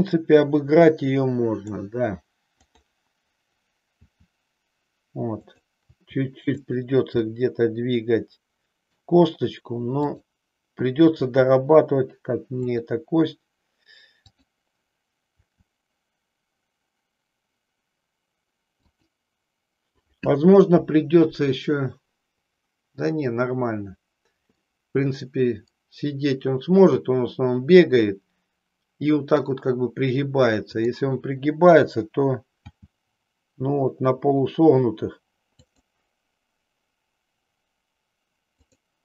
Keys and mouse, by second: 2.7 click, 3.9 r, 5.9 r, 6.7 click, 7.2-9.1 middle drag, 10.1 click, 11.2 r, 14.3 click, 15.4 r, 18.9 click, 24.6-29.6 middle drag, 30.7 click, 32.6 g, 38.6 click.